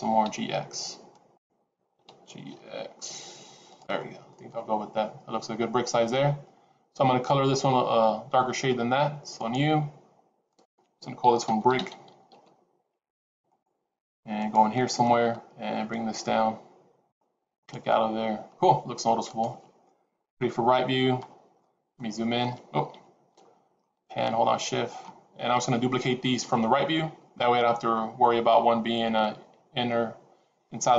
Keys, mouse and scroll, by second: 1.8 g, 4.0 scroll down 2, 4.2 middle click, 9.3 click, 10.4 click, 13.4 click, 17.4 click, 19.1 click, 20.2 KP_3, 21.4-21.8 scroll up 4, 21.8 middle click, 22.9 KP_3, 23.7 shift+middle click, 25.3-25.8 scroll down 1, 26.1-26.5 scroll down 2.